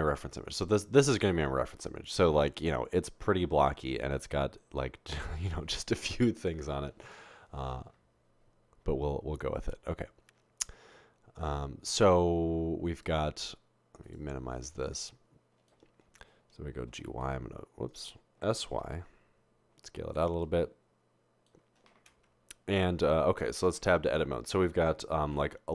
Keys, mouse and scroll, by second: 17.1-17.4 typing, 18.6 typing, 23.8 Tab, 25.3 ctrl+r.